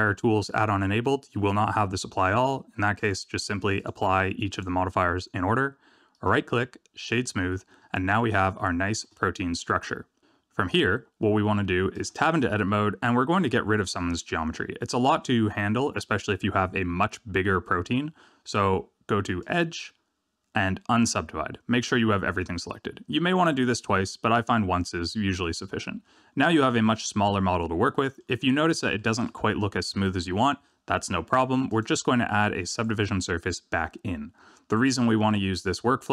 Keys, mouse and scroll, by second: 2.9 click, 4.4 click, 6.1 right click, 8.6 shift+middle click, 9.1 middle click, 11.9 Tab, 13.8 a, 19.4 click, 23.1 scroll down 2, 26.0 Tab, 26.3 middle click, 27.9 middle click, 28.4-28.9 scroll up 4, 28.9 shift+middle click, 31.8 click, 33.2 click.